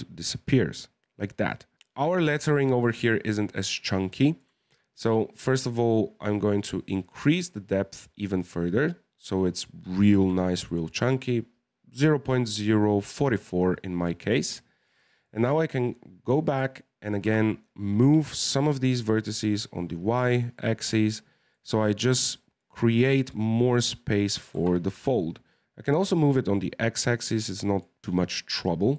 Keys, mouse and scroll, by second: 1.7 KP_1, 2.4-3.8 shift+middle drag, 3.8-4.2 scroll down 2, 4.2-5.5 shift+middle drag, 5.5 right click, 6.9-10.0 shift+drag, 10.6 scroll up 1, 10.6-13.6 shift+middle drag, 13.6-14.0 scroll up 2, 14.0-16.6 middle drag, 16.6 right click, 17.2 g, 20.6-22.6 middle drag, 22.6 right click, 23.0-24.5 middle drag, 24.5 g, 26.2-28.9 middle drag.